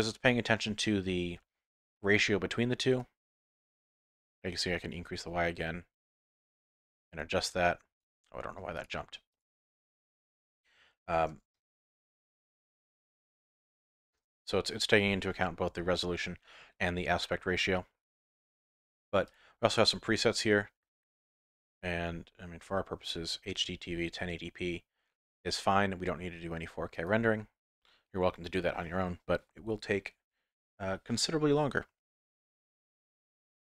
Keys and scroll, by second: 14.0 KP_0.